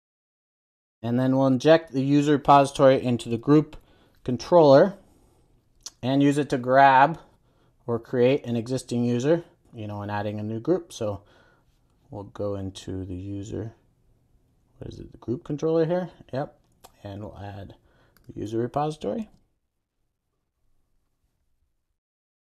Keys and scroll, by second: 0.2 super+s.